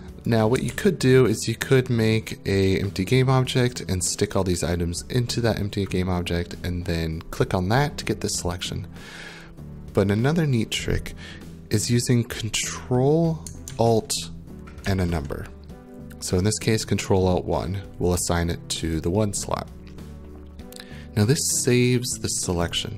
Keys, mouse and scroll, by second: 0.3 click, 0.7 ctrl+z, 14.8 ctrl+alt+1, 22.7 click.